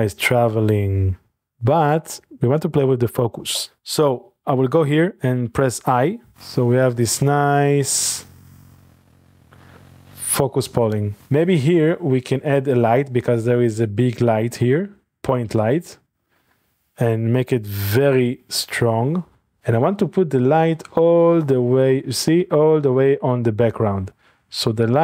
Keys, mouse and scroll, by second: 1.4 click, 2.3 ctrl+s, 6.3-11.2 drag, 11.7-12.7 shift+middle drag, 11.9-14.6 scroll down 3, 14.7 shift+a, 15.1 click, 15.8 middle click, 16.2-16.8 scroll down 2, 17.1-17.7 scroll down 1, 17.7 scroll down 1, 18.0-19.5 drag, 19.5 typing, 24.1 click, 24.4 typing.